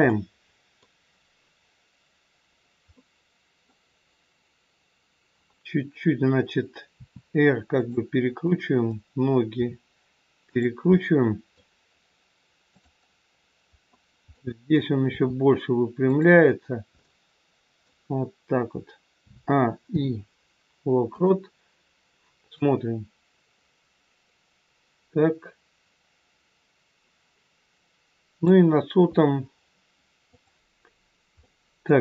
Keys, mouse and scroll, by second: 0.1 middle click, 7.0 r, 8.5 click, 9.6 r, 10.8 middle click, 12.7 click, 14.2 middle click, 15.1 r, 16.9 middle click, 19.2 a, 19.9 i, 22.6 click, 31.5 middle click.